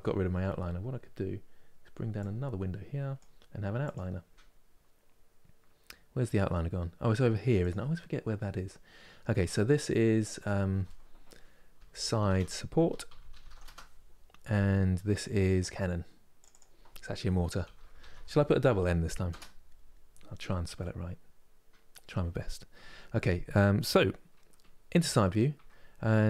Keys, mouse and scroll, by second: 1.9-6.5 drag, 9.9-12.9 drag, 12.9 p, 14.8-17.6 drag, 17.6 n, 20.5-23.5 middle drag, 24.3 KP_3.